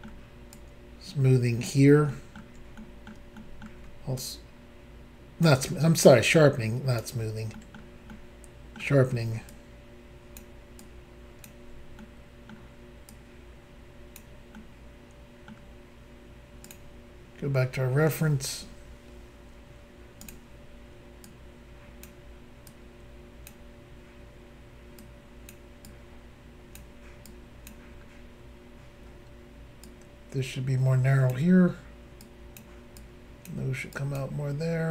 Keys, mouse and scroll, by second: 0.5 ctrl+click, 2.1 ctrl+middle click, 2.8 middle click, 3.3 middle click, 4.2 ctrl+click, 6.1 ctrl+click, 7.6 ctrl+middle click, 7.8 middle click, 8.1 middle click, 9.5 ctrl+click, 10.8 ctrl+click, 12.0 middle click, 13.1 click, 14.6 middle click, 16.7 click, 16.7 click, 17.2-17.9 scroll up 1, 20.2 click, 20.3 click, 21.2 click, 22.7 click, 25.0 click, 25.8 click, 27.2 click, 27.9 scroll down 1, 29.0 scroll down 1, 29.8 click, 32.2 click, 33.0 click, 33.9 click.